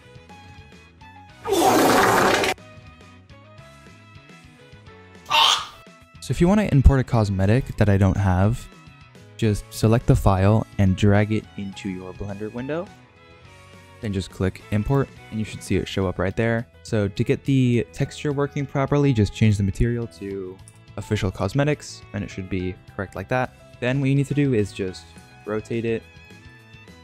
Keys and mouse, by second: 0.0-0.3 typing, 0.1 ctrl+z, 0.2 click, 0.3 ctrl+z, 0.3 middle click, 0.4 ctrl+Tab, 0.4 ctrl+z, 0.4 click, 0.9 middle drag, 1.4 r, 2.5 click, 2.5 middle click, 2.8 r, 16.2-16.6 middle drag, 17.5-18.0 shift+middle drag, 21.7-25.1 middle drag, 25.1 r, 26.4 r.